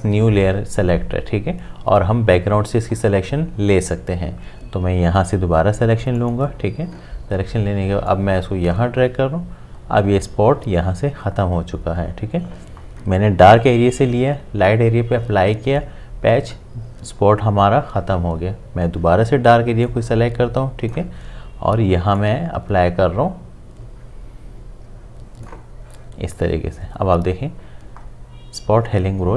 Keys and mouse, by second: 6.2-10.9 drag, 19.8 click, 19.9-27.8 drag.